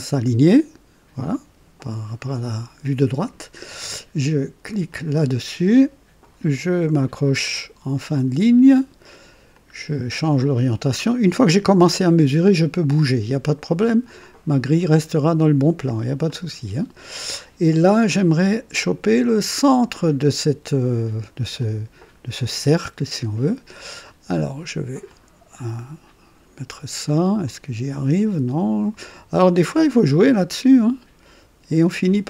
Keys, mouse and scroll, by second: 4.8 click, 8.0 click, 9.5-11.6 drag, 14.1 click, 16.2 click, 21.5-23.3 drag, 25.0 click, 27.4 click, 29.5 click.